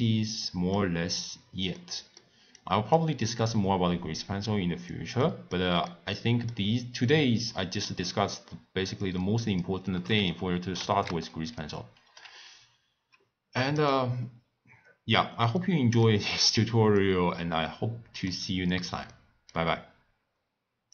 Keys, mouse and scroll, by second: 2.5 click, 3.2 click, 4.2 click, 5.2-7.1 middle drag, 7.1 click, 9.0 click, 10.8 ctrl+a, 14.2 scroll down 1, 14.3-14.7 scroll up 1, 14.7-15.1 scroll down 2, 15.1-15.5 scroll up 1, 15.5 middle click, 16.2-17.0 scroll down 8, 17.0-18.4 middle drag, 18.4 scroll up 3, 19.1-20.9 middle drag.